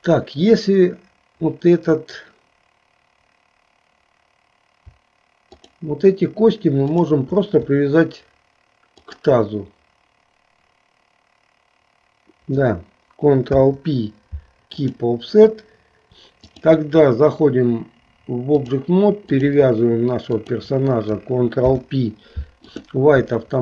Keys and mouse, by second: 5.5 shift+click, 6.9 shift+click, 9.0 shift+click, 13.5 ctrl+p, 16.4-18.9 drag, 19.5 click, 20.5 shift+click, 21.6 ctrl+p.